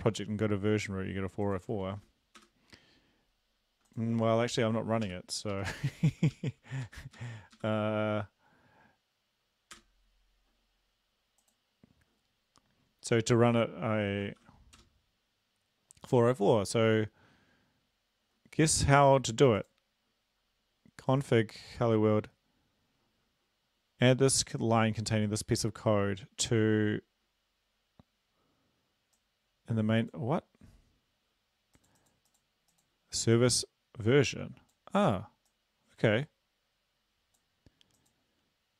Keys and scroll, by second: 1.9 ctrl+v, 2.4 Return, 5.0 Up, 5.5 Up, 6.3 Up, 6.8 Up, 7.2 Up, 7.6 Up, 9.7 Return, 14.2 ctrl+v, 14.8 Return.